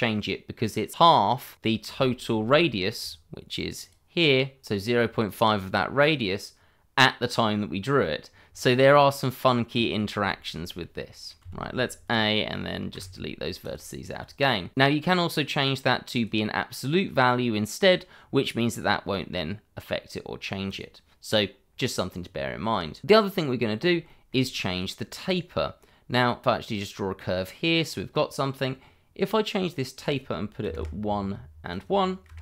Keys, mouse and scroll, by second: 1.4-1.7 scroll up 1, 2.2 scroll up 1, 2.8 click, 6.1 click, 7.3 middle click, 8.2 scroll down 1, 8.5 middle click, 9.9 scroll down 1, 10.3 shift+middle click, 11.4 a, 13.6 click, 16.1 click, 20.7 click, 24.1 shift+middle click, 26.4 click, 29.9 click, 30.6 1, 30.7 Return, 31.7 click, 32.2 1, 32.3 Return.